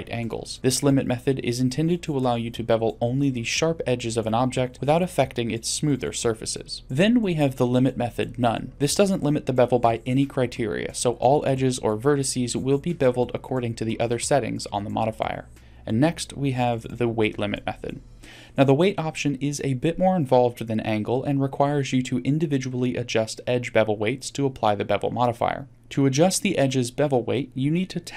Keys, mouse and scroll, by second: 15.1-16.4 drag, 17.3-17.7 middle drag, 25.7 Tab.